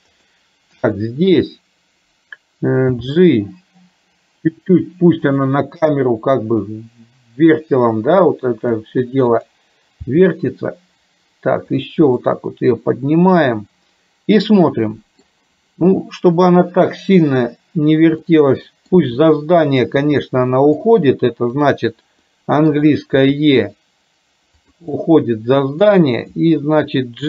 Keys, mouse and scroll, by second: 0.2 click, 3.0 g, 8.2 click, 10.2 g, 12.4-15.2 middle drag, 18.4 middle click, 19.3 middle click, 20.6 middle click, 21.6 click, 22.3 middle click, 23.4 e, 25.0 middle click.